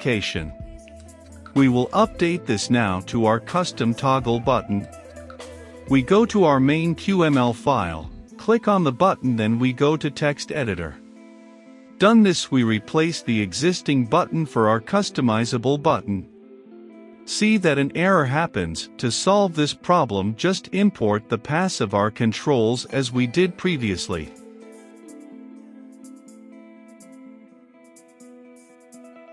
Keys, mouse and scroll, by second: 9.9-13.2 typing, 14.5-16.0 middle drag, 16.0 click, 17.0 Return, 17.5-19.3 typing, 18.5 Return, 20.4-22.0 typing, 21.0 ctrl+space, 24.1-29.3 drag.